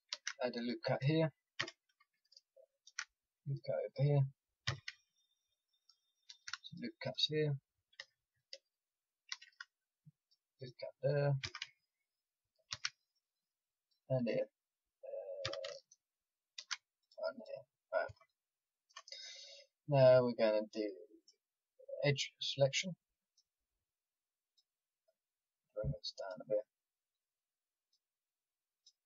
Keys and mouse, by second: 0.1 ctrl+r, 1.6 a, 2.8 ctrl+r, 4.6 a, 6.2 ctrl+r, 7.9 a, 9.3 ctrl+r, 11.4 a, 12.7 ctrl+r, 15.4 a, 16.5 ctrl+r.